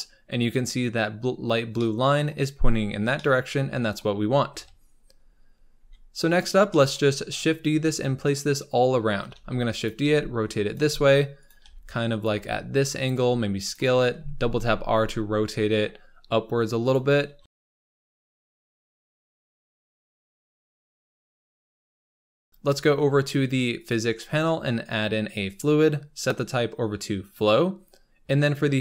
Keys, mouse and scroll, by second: 1.4 scroll down 3, 1.7-2.9 middle drag, 2.9 scroll down 2, 3.1-4.5 middle drag, 4.5 KP_7, 5.2-5.7 scroll up 6, 5.7 g, 6.6-7.6 shift+middle drag, 7.6-8.9 scroll down 5, 8.9-9.3 scroll up 3, 9.3-14.0 typing, 17.3-18.6 typing, 19.0 scroll down 3, 19.2 Tab, 19.4 scroll up 4, 19.5 Tab, 19.7-22.2 typing, 22.5-23.7 scroll up 8, 25.5-28.8 drag.